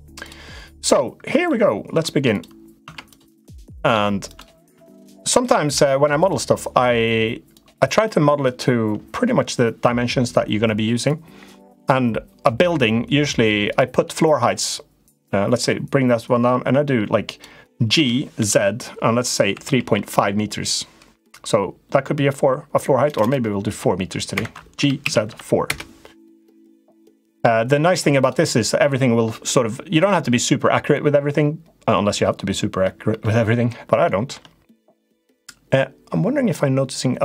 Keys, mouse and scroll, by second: 1.3 shift+middle click, 2.1 click, 2.6 Tab, 3.0 Tab, 3.2 click, 4.0 click, 4.5 Tab, 4.8 Tab, 5.1 click, 5.5 Tab, 5.9 click, 7.3 click, 10.9-13.1 drag, 13.4 click, 14.9-17.2 drag, 17.7 g, 24.5 g, 27.9 click, 32.5 middle click, 33.8 shift+middle click.